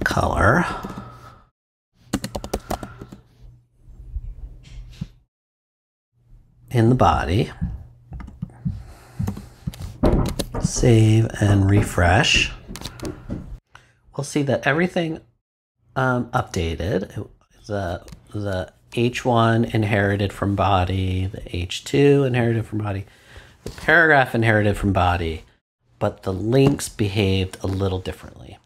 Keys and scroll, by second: 0.0-3.0 typing, 9.2 ;, 10.1 super+;, 10.2 super+s.